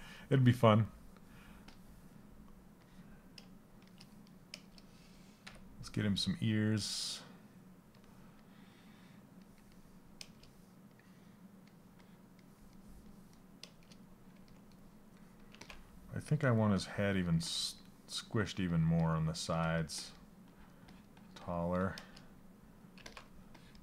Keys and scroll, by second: 17.0 s.